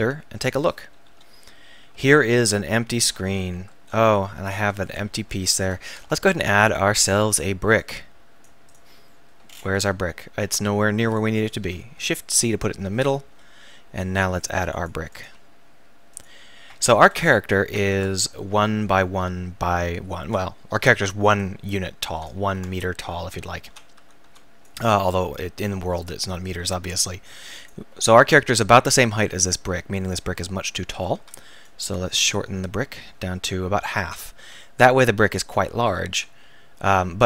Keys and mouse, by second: 1.1 KP_1, 4.0 Tab, 4.5 x, 6.6-8.8 drag, 11.0 x, 11.8 shift+c, 13.3 KP_1, 17.9 Tab, 21.5 click, 22.4 ctrl+z, 23.7 z, 24.0 a, 24.3 b, 25.8-27.6 ctrl+drag, 31.0 a, 31.2 b, 32.3-34.1 drag, 35.9 a, 36.3 z.